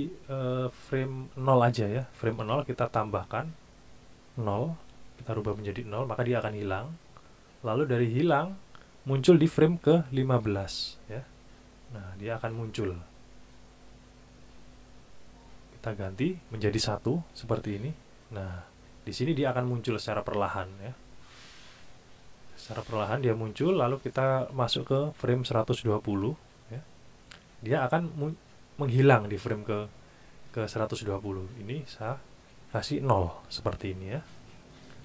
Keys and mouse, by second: 1.0 click, 2.1 KP_0, 2.4 KP_Enter, 3.7 click, 5.1 KP_0, 5.4 KP_Enter, 8.8 click, 9.8 KP_1, 10.1 KP_5, 10.4 KP_Enter, 16.0 click, 17.3 KP_1, 17.7 KP_Enter, 24.4 click, 25.5 KP_1, 25.7 KP_2, 26.0 KP_0, 26.3 KP_Enter, 31.8 click, 33.5 KP_0, 33.8 KP_Enter.